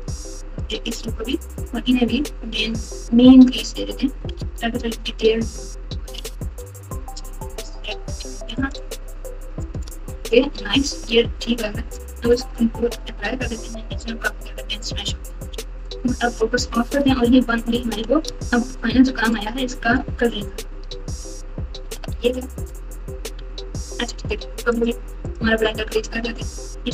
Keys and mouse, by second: 2.9 click, 4.3 alt+z, 6.1 g, 9.5 click, 11.1 Tab, 12.7 ctrl+a, 13.5 Tab, 13.9 Tab, 14.3 Tab, 15.4 KP_Multiply, 15.4 KP_Multiply, 18.2 z, 20.4-22.6 typing, 24.1 z.